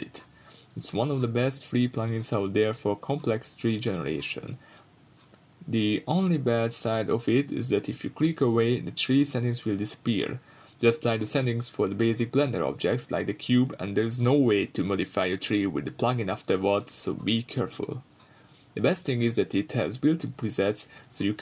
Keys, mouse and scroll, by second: 0.0-0.5 middle drag, 0.5 click, 1.0-2.7 shift+middle drag, 2.3-2.7 scroll up 2, 2.7-11.0 drag, 7.0 scroll up 1, 10.7-11.0 scroll down 2, 11.0-13.1 shift+middle drag, 13.1-17.4 drag, 17.4 scroll up 1, 17.7 Tab, 17.9 scroll up 1, 18.4-18.8 scroll down 2, 18.5 Tab, 18.8 x, 19.0 scroll up 1, 19.4 shift+a.